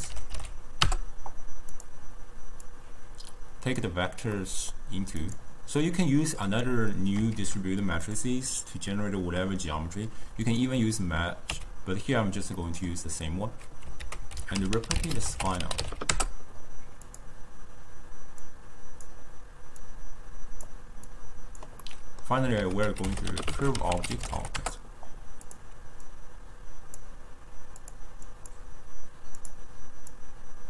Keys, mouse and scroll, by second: 2.7 drag, 4.4-5.3 middle drag, 5.3 click, 6.1-7.7 drag, 7.7 shift+d, 10.5 click, 11.9 x, 12.6-14.1 middle drag, 14.1 ctrl+a, 18.5 drag, 19.9 click, 21.2 click, 21.9-22.6 middle drag, 22.6 ctrl+a, 26.1 drag, 28.3 click, 28.8 click, 29.5-30.6 drag.